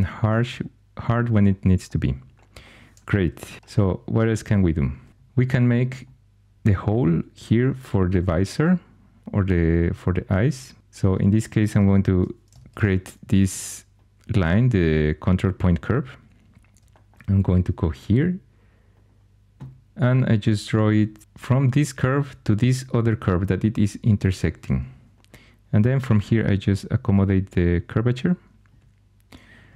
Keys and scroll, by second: 3.5 alt+h, 12.7 ctrl+super+c, 24.6 1, 26.0 typing.